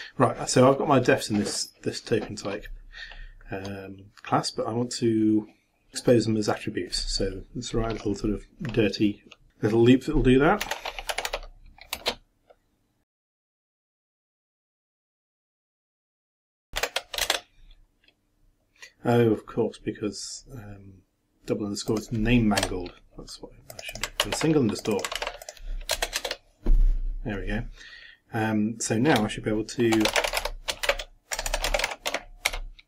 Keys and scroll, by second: 13.7-17.3 typing, 24.2 ctrl+c, 25.2 ctrl+v, 26.0 shift+Return, 29.7-32.5 typing.